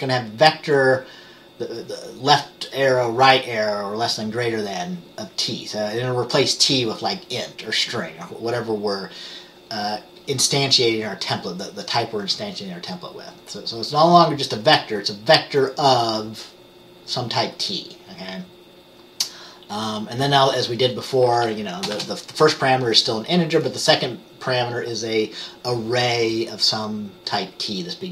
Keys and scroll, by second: 22.1 t.